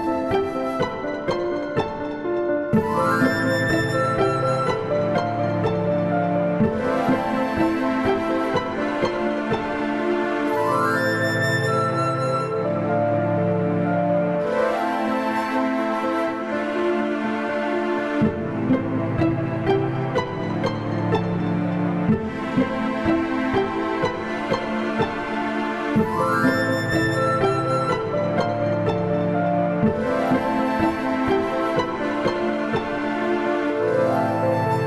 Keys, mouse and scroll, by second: 2.0 click, 3.7 click, 5.6 ctrl+KP_2, 6.2 ctrl+KP_8, 6.7-7.1 KP_Add, 8.6 g, 10.9 KP_Decimal, 11.6 a, 11.7 a, 12.5 ctrl+r, 16.0 a, 16.5 click, 17.8 click, 21.2 click, 23.1 ctrl+z, 23.2 ctrl+z, 23.7 click, 25.4 click, 26.9 click, 28.5 click, 32.1 click.